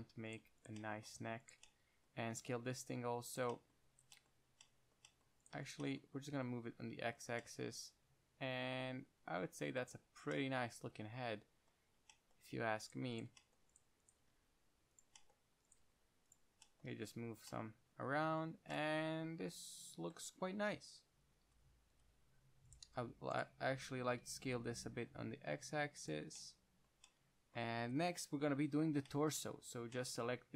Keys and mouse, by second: 0.6 middle click, 2.6 s, 6.4 g, 7.5 middle click, 10.1-12.1 middle drag, 13.1-17.0 drag, 14.5 g, 15.3-17.0 right drag, 16.1 g, 17.0 middle click, 17.5-17.9 drag, 17.5-17.9 right drag, 22.2-24.3 typing, 23.0 click, 26.4 click, 28.5 KP_1.